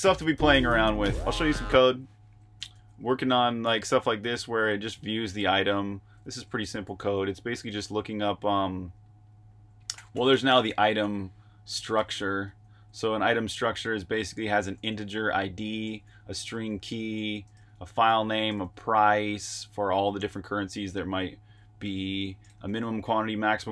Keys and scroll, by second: 1.9 super+q, 2.5-6.0 typing, 7.1-7.8 typing, 8.9-12.9 typing, 15.8-16.4 typing, 17.5-18.9 typing, 21.4 Escape, 21.7 typing.